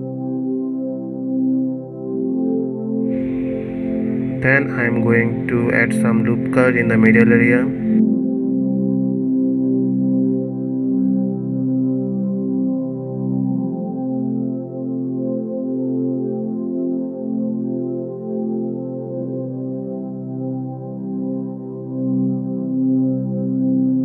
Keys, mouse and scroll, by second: 0.0-0.3 scroll down 3, 0.5 middle click, 1.4-1.8 scroll down 3, 1.8 middle click, 2.4-2.8 scroll up 2, 2.8-5.6 middle drag, 5.6-6.8 scroll up 2, 7.3 ctrl+r, 10.4-11.5 middle drag, 11.5 ctrl+r, 13.8-16.7 middle drag, 16.7 3, 17.7 middle click, 19.1 shift+click, 19.5 shift+click, 20.7 shift+click, 21.3 shift+click, 21.8-23.3 middle drag, 23.3 shift+click, 23.7 shift+click.